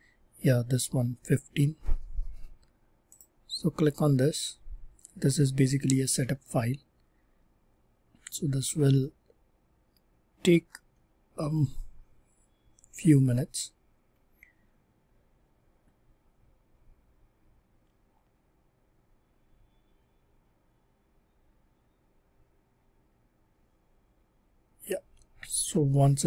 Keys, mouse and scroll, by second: 3.0 click, 10.9 scroll down 1, 11.5 scroll down 1, 13.0-14.0 scroll, 14.0-16.5 scroll.